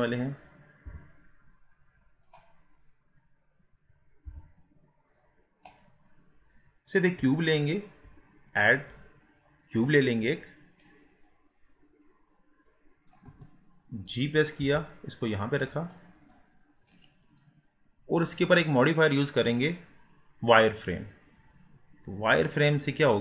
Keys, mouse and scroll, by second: 0.9 g, 2.6-4.3 scroll down 5, 4.3 g, 5.7 click, 6.1-8.9 middle drag, 8.9-11.9 drag, 12.7-13.3 middle drag, 13.3 KP_1, 14.7 g, 16.3 middle click, 17.1-17.7 scroll up 4.